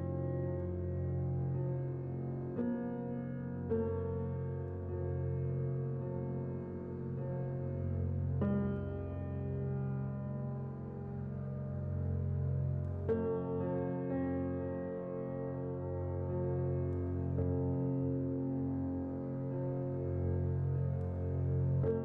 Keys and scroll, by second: 0.9 z, 3.2-4.2 typing, 4.2 Return, 5.2 typing, 7.3-7.7 typing, 7.7 Return, 10.8-11.1 typing, 18.5 z.